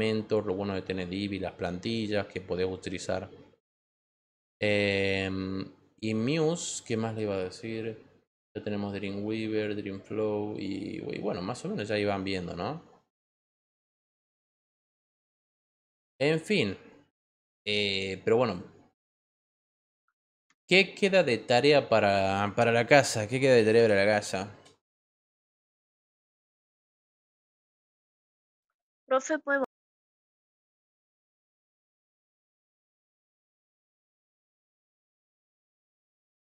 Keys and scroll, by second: 23.1-24.5 typing, 26.3 Return, 28.0-29.1 typing, 29.5 Return, 33.0-34.4 typing.